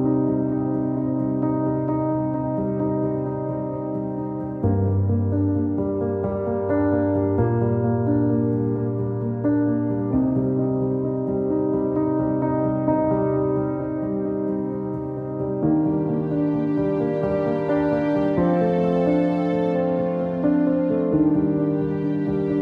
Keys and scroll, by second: 0.5 e, 5.0 ctrl+z, 14.7 q, 20.2 w.